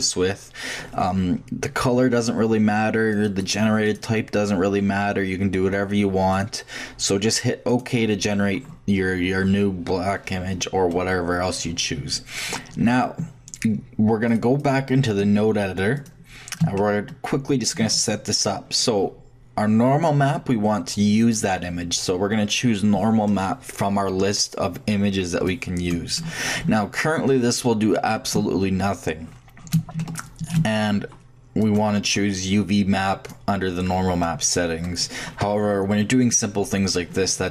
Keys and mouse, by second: 9.3-11.6 middle drag, 14.3-16.5 drag, 16.8-17.8 shift+middle drag, 23.1 middle click, 30.0-33.1 shift+drag.